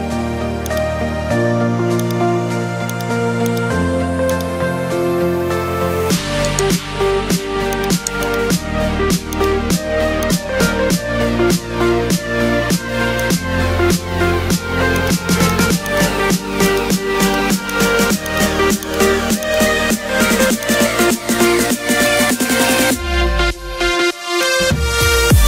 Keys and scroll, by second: 1.6 ctrl+z, 5.9 [, 6.1 [, 6.3 [.